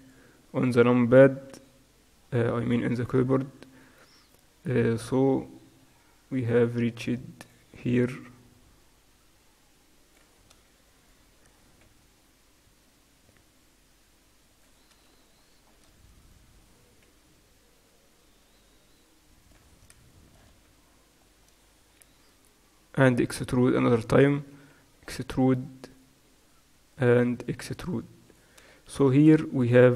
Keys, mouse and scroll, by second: 0.6-2.5 right drag, 1.6 g, 3.1-6.1 right drag, 3.5 g, 7.9-9.6 right drag, 8.6 g, 11.0-13.4 right drag, 12.4 e, 16.3-18.0 right drag, 17.5 g, 20.1 right click, 21.1-24.2 middle drag, 21.3 right click, 22.1 e, 24.7 e.